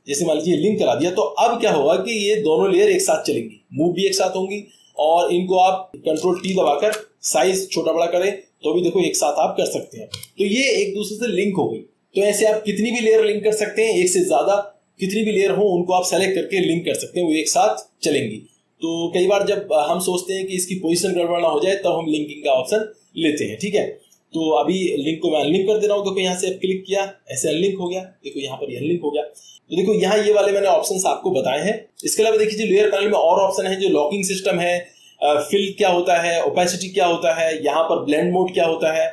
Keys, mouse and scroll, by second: 0.6 click, 1.6-2.8 drag, 4.5 click, 5.5 click, 6.7 ctrl+t, 9.8 click, 10.1 Escape, 27.0 click, 27.9 click, 28.4 click, 34.2 click, 37.3 click.